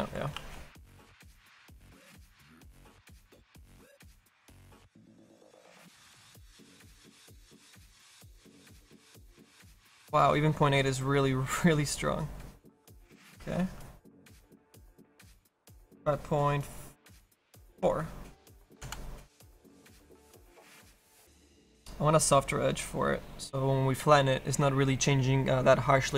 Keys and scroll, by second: 0.4 ctrl+z, 3.8 KP_8, 13.4 ctrl+z.